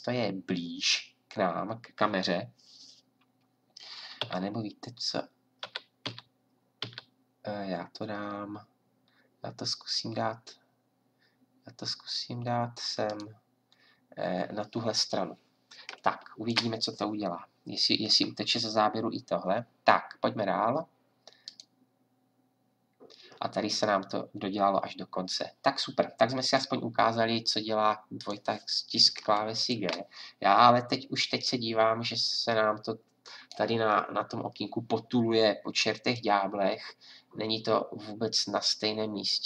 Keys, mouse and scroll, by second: 4.2 g, 33.3-36.1 middle drag.